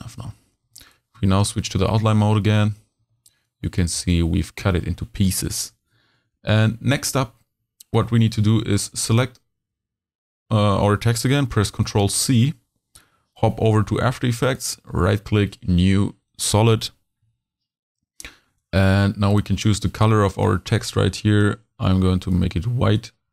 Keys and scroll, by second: 1.0 super+v, 1.1 super+y, 1.7 super+z, 2.2 z, 3.0 h, 6.8 super+y, 11.5 super+c.